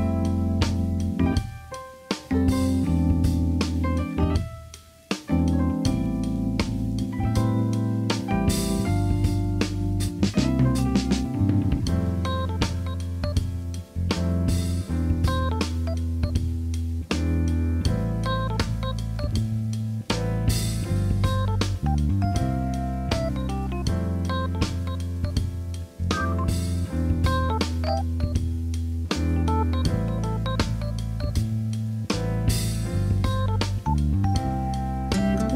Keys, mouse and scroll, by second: 0.0 n, 0.5 shift+a, 2.1 s, 4.3-5.4 drag, 6.1 alt+z, 6.6 shift+middle click, 7.4 s, 10.4 s, 11.9 KP_3, 12.6 shift+middle click, 14.1-14.8 drag, 15.8 shift+middle click, 16.2 Tab, 16.9 click, 17.7 click, 20.7-23.7 drag, 24.5 e, 26.5 s, 27.4 click, 29.1 click, 29.8 click, 30.6 click, 31.6 e, 34.2 click, 34.6-35.5 drag.